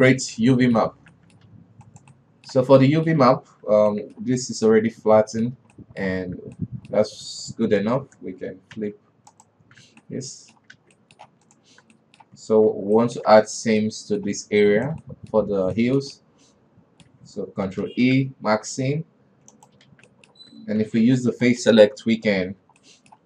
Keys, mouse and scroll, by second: 0.1 a, 0.5-1.4 middle drag, 1.4 alt+a, 1.6 middle click, 2.0 ctrl+s, 2.3 right click, 2.6 middle click, 3.0 Tab, 3.2-6.7 middle drag, 6.7 a, 7.0-8.2 middle drag, 8.2 shift+n, 9.2 q, 10.3 Tab, 10.5-11.2 middle drag, 11.2 alt+a, 11.4 middle click, 11.9 right click, 12.1 Tab, 12.4 middle click, 13.2 alt+h, 13.4-13.8 middle drag, 13.8 alt+a, 14.0 alt+KP_2, 14.3-15.2 middle drag, 15.2 alt+right click, 15.5 middle click, 15.9 scroll up 1, 16.2-18.3 shift+middle drag, 18.3 ctrl+e, 20.4 alt+a, 20.5-21.3 middle drag, 21.3 alt+KP_3, 21.9 right click, 22.9 l.